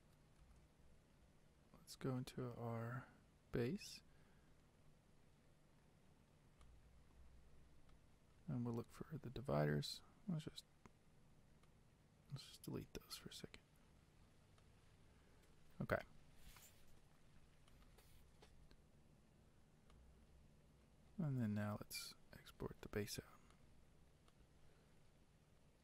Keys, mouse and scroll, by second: 0.6 ctrl+z, 3.8 click, 14.9-23.6 drag.